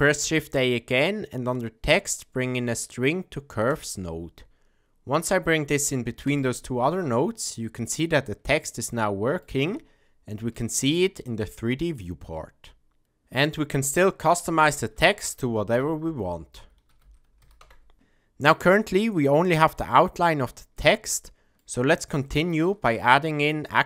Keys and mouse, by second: 7.8-8.7 middle drag, 8.9-9.4 ctrl+middle drag, 9.6-10.5 shift+middle drag, 11.5-11.9 middle drag, 12.2-13.0 shift+middle drag, 14.2-17.9 drag, 19.7-20.3 ctrl+middle drag, 20.7-21.6 middle drag, 22.2-22.7 shift+middle drag.